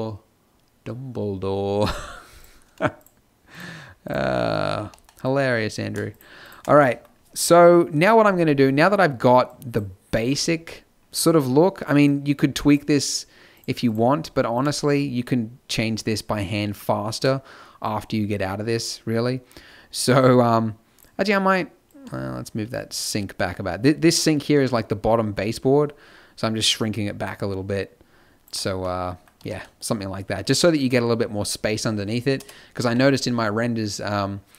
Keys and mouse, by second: 4.7 b, 5.9 middle click, 6.7 b, 10.1 z, 29.4 z, 32.8 z.